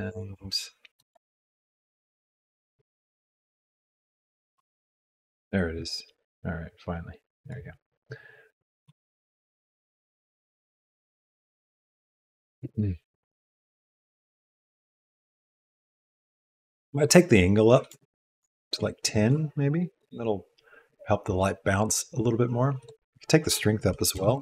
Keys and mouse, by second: 1.2 r, 2.5 r, 4.5 r, 8.9 r, 12.5-13.7 drag, 16.7-18.0 drag, 22.9-24.4 drag.